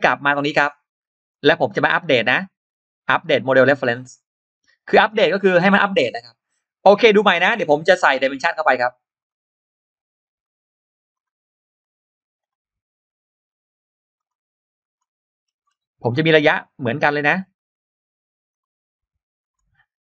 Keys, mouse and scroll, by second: 0.4 click, 1.1 right click, 3.5 click, 5.4 scroll down 2, 5.8 scroll up 2, 7.2 click, 9.0 click, 11.0 click, 12.2 click, 14.0 click, 14.6 click, 15.2-15.8 scroll up 2, 17.4 click, 18.3 click, 19.2 click.